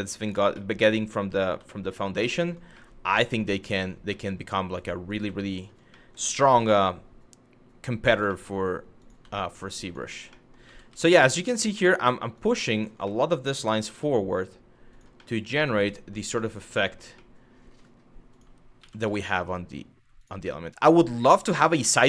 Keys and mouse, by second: 0.3 middle click, 1.4 shift+middle click, 1.9 shift+middle click, 2.5 middle click, 3.8 shift+middle click, 5.2 shift+click, 5.7 middle click, 6.0 g, 6.2 y, 7.7 click, 8.0 shift+middle click, 10.1 middle click, 10.3 g, 10.5 y, 11.5 shift+middle click, 12.0 click, 12.8 middle click, 14.5 click, 14.9 middle click, 16.1 middle click, 16.5 shift+middle click, 16.9 middle click, 18.4 g, 18.7 y, 19.8 click, 20.1-21.1 middle drag, 21.6 middle click.